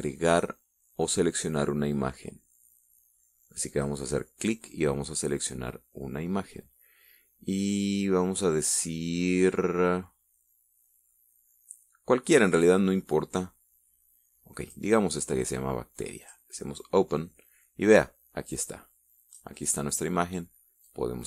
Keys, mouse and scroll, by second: 4.4 click, 10.8 scroll down 2, 12.1 scroll down 2, 15.3 click, 16.9 click, 19.2-20.2 drag.